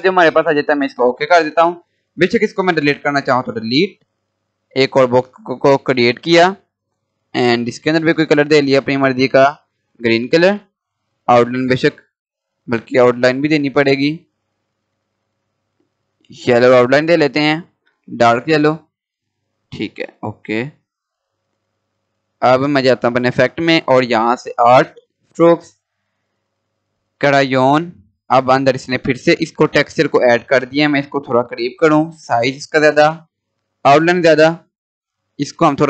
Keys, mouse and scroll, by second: 2.5 Delete, 3.9 click, 4.1-7.1 drag, 11.0 right click, 11.5 click, 13.9 right click, 14.4 click, 16.4 right click, 17.6 click, 18.7 scroll up 1, 19.9 scroll down 1, 20.4-20.7 scroll down 1, 20.9-21.2 scroll up 1, 22.6 click, 29.0 scroll up 1, 29.6-30.4 scroll down 1, 30.4-30.7 scroll up 1, 32.0 click.